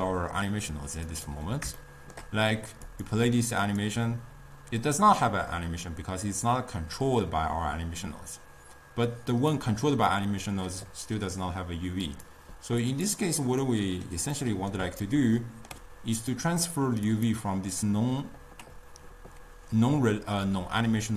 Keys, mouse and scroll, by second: 0.0 click, 1.3 click, 1.9-3.2 shift+middle drag, 3.2-6.9 drag, 9.5 click, 12.3-17.4 drag.